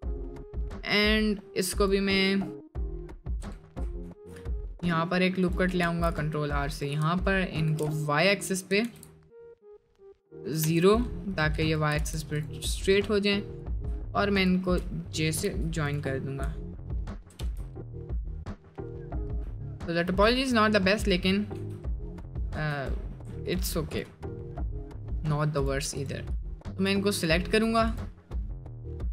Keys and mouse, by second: 4.0 ctrl+r, 8.7 s, 11.9 g, 15.1 middle click, 15.5 j, 16.2 middle click, 17.4 j, 17.9 middle click, 18.2 middle click, 18.7 middle click, 20.4 middle click, 21.0 middle click, 21.5 4, 22.6 3.